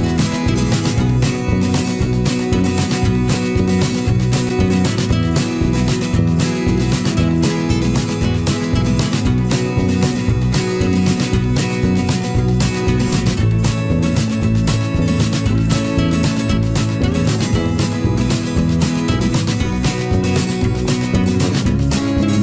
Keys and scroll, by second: 0.7 ctrl+s.